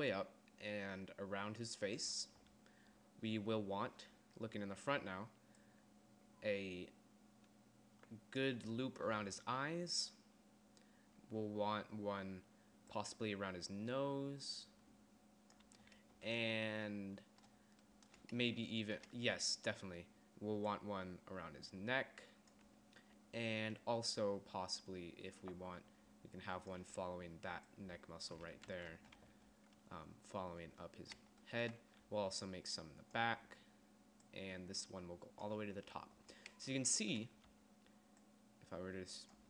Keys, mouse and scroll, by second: 2.2 d, 5.2 d, 5.7 d, 5.7 d, 8.6 d, 9.3 d, 11.4-15.8 d, 16.5 d, 19.5-22.8 d, 23.9 d, 26.9-28.9 typing, 28.9 ctrl+z, 32.2-34.4 d, 35.7 d, 36.7 d, 37.7-39.4 d.